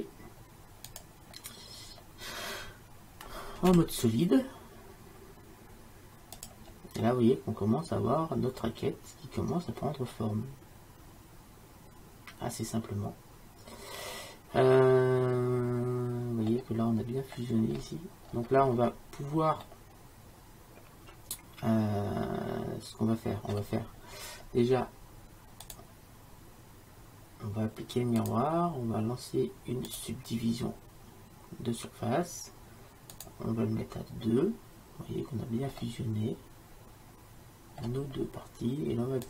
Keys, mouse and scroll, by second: 3.8 z, 7.1-8.5 middle drag, 9.0-10.8 middle drag, 17.2-21.7 middle drag, 25.7-27.8 drag, 28.3-33.1 drag, 33.2-35.9 drag, 35.9-38.5 middle drag.